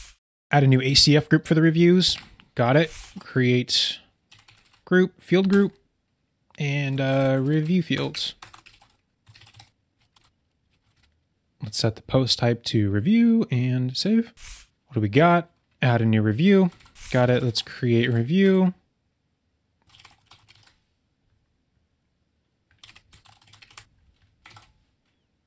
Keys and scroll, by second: 2.8 super+k, 7.9 BackSpace, 10.3 BackSpace, 16.9 super+k, 19.9 BackSpace, 24.5 super+v.